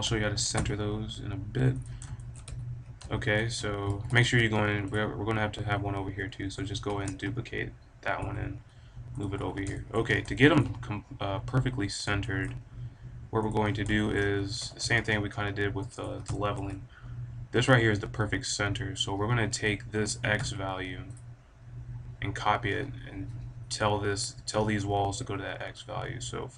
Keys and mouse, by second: 0.7 click, 1.9 click, 2.4 a, 3.4 click, 3.8 ctrl+z, 4.0 ctrl+z, 4.5 g, 6.9 shift+d, 9.3 a, 9.9 middle click, 10.1 click, 10.6 click, 11.4 click, 13.6-16.3 drag, 14.5 b, 20.1 g, 21.1-21.7 drag, 21.7-22.7 right drag, 22.7 click, 23.1-25.7 middle drag, 25.9-26.5 middle drag.